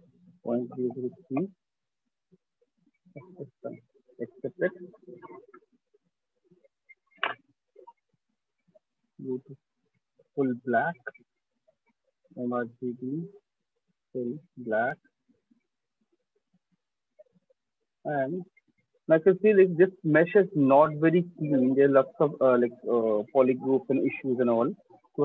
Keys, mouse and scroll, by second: 0.3-0.6 typing, 0.8 Return, 1.9 typing, 1.9 click, 3.4 click, 3.9 Return, 4.5 click, 4.8 ctrl+click, 5.6 shift+click, 9.0 click, 11.5 click, 12.5 click, 13.3 click, 16.3 click, 17.2 alt+click, 17.3 alt+click, 17.7 right click, 18.4 f, 19.1 click, 19.6 click, 20.9 right click, 21.5 click, 24.5-25.2 drag.